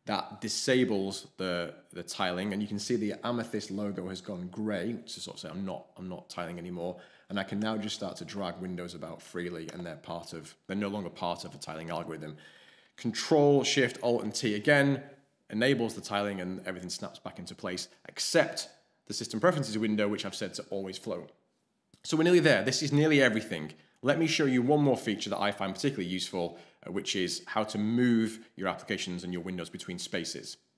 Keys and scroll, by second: 14.2 ctrl+alt+shift+t.